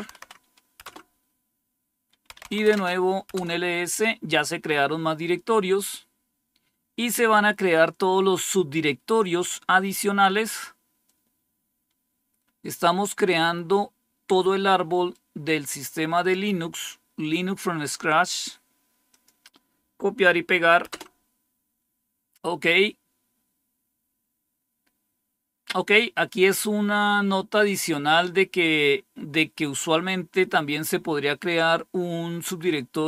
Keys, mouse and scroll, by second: 0.0 Right, 0.7 Return, 2.0-2.9 typing, 3.2 Return, 5.4-6.6 scroll down 1, 9.8-10.9 scroll down 2, 10.9-13.0 drag, 14.8 right click, 16.0 click, 18.2 right click, 18.6 right click, 19.0 click, 20.8 Return, 22.9-23.6 scroll down 1, 23.6-24.7 scroll down 1, 24.7-25.3 scroll down 1.